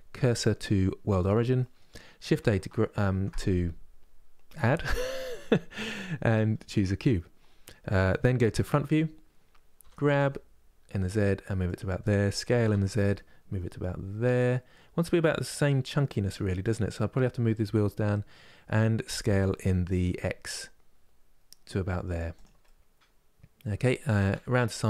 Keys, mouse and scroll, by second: 1.3-2.8 middle drag, 2.8 shift+a, 8.3 KP_1, 9.5 g, 22.3-24.0 middle drag, 24.0 KP_3.